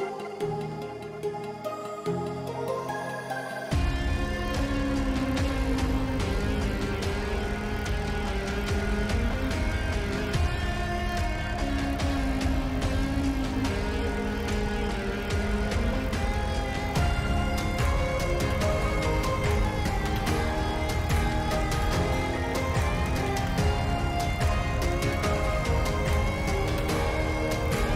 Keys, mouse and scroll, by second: 2.4-9.0 drag, 10.1-13.0 drag, 13.6-16.7 drag, 20.7 shift+a, 25.9-27.9 drag.